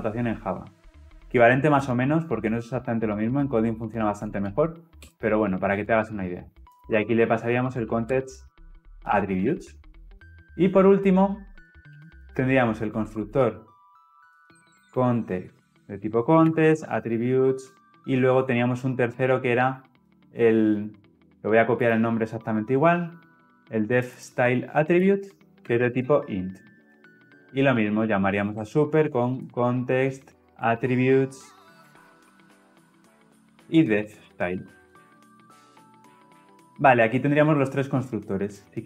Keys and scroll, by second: 9.4 ctrl+alt+l, 9.6 ctrl+alt+o, 13.0 Return, 25.0 ctrl+c, 25.6 ctrl+v, 28.4 Return, 34.8 ctrl+alt+l, 35.1 ctrl+alt+o.